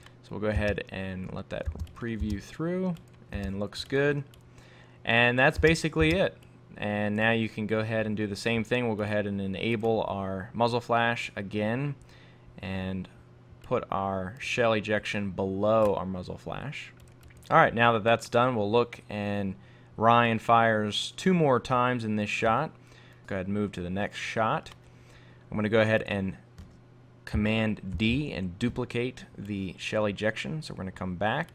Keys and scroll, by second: 28.0 super+d.